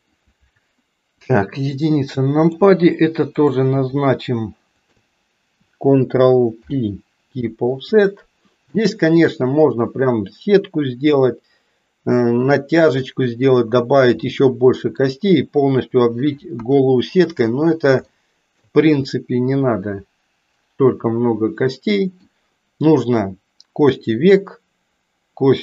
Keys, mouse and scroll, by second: 1.3 KP_1, 2.2 middle click, 3.4 click, 6.5 ctrl+p, 8.8 middle click, 14.3 middle click, 16.5 KP_1, 18.3 shift+middle click, 19.0-22.4 middle drag.